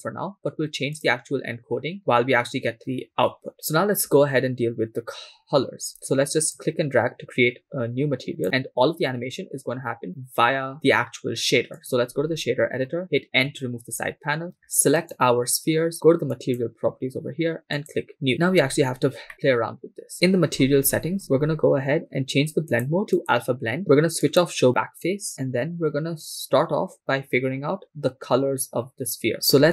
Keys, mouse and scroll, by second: 1.0 click, 2.2 scroll down 3, 3.5-5.6 scroll down 2, 6.6-8.4 drag, 10.7-12.0 drag, 13.5 n, 15.1 right click, 16.4 click, 17.8 click, 18.5-19.3 scroll up 5, 19.3 scroll up 1, 19.3 middle click, 20.2-22.7 scroll down 9, 22.7 scroll down 1, 22.7-23.4 drag, 24.2 click, 25.1 scroll down 2, 29.3 middle click.